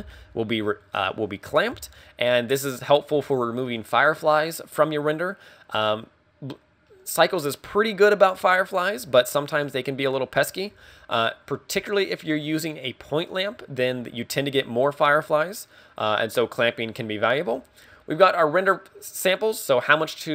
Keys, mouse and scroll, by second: 2.8 scroll down 1, 3.0 scroll up 2, 4.9 middle click, 6.4 scroll up 2, 6.9 middle click.